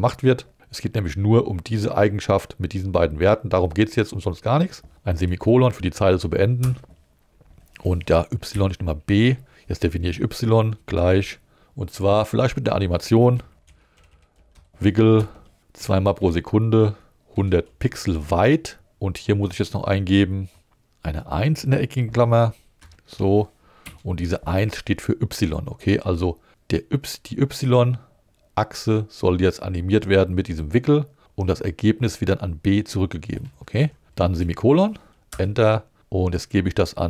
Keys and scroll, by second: 5.2 shift+,, 6.6 Return, 8.5-11.1 typing, 13.1-16.2 typing, 15.2 Return, 17.3 l, 17.7 0, 18.9 Right, 22.8 alt+5, 23.8 alt+1, 24.2 i, 33.8 Right, 34.4 shift+,, 35.3 Return.